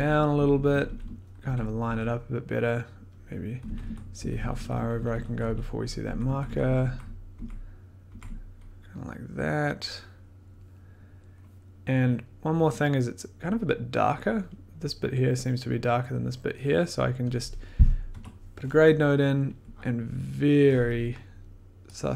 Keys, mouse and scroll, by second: 0.1 Down, 0.3 Down, 0.4 Down, 0.6 Down, 0.8 Down, 1.0 Down, 1.4 Down, 1.8 Down, 3.2 click, 3.6 Down, 3.8 Down, 4.1 Down, 4.3 Down, 4.5 Down, 4.7 Down, 4.9 Down, 5.1 Down, 5.2 Down, 5.4 Down, 5.6 Down, 6.1 Up, 6.2 Up, 6.4 Up, 6.6 Up, 6.8 Up, 7.3 Up, 7.6 click, 7.6-8.0 scroll down 10, 12.2-14.9 drag, 18.1 g.